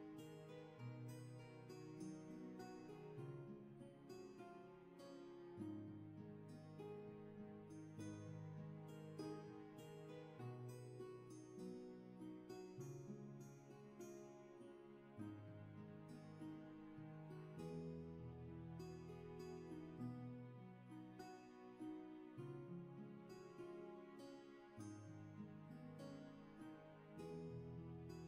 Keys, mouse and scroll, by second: 10.3-11.9 scroll up 1.